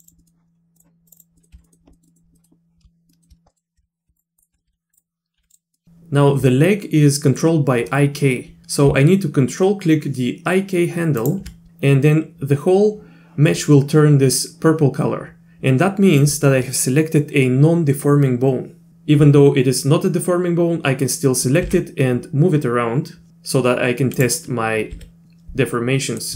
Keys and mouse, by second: 0.0 click, 0.2 middle click, 0.7 click, 1.1 click, 1.2 click, 1.4 middle click, 1.5 z, 1.6 click, 1.9 click, 2.1 click, 2.3 click, 3.1 shift+click, 3.5 middle click, 3.8 z, 4.4 ctrl+click, 4.7 r, 5.4 r, 5.7 middle click, 11.2 ctrl+click, 21.6 g, 24.9 r, 26.1 middle click.